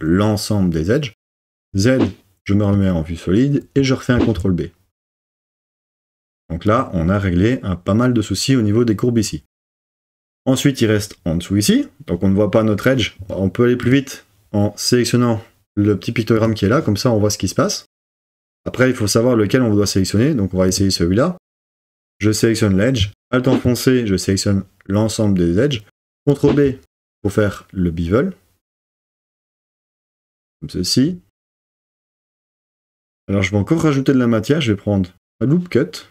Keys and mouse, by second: 1.7 z, 4.2 super+b, 6.7 click, 13.8 click, 16.4 click, 26.5 super+b, 29.9 click.